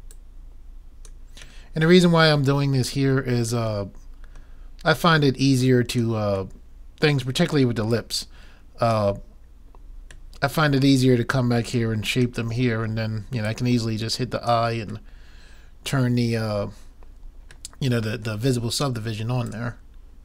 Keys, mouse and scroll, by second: 1.7-3.6 middle drag, 1.7 right click, 3.8-5.7 middle drag, 6.0 click, 6.6 middle click, 8.3-9.7 drag, 9.9-12.1 middle drag, 11.6-13.2 drag, 12.5 middle click, 13.4 middle click, 14.2 click, 15.4-16.7 middle drag, 18.0-19.1 middle drag, 19.5-20.2 drag.